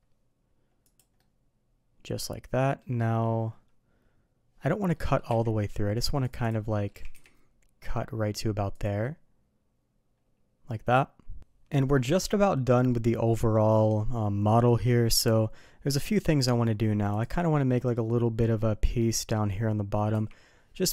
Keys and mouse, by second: 1.1-2.1 middle drag, 2.5 middle click, 4.9 middle drag, 5.2 q, 6.6-8.8 middle drag, 6.9 g, 9.0-11.4 middle drag, 17.1 click, 20.1 d.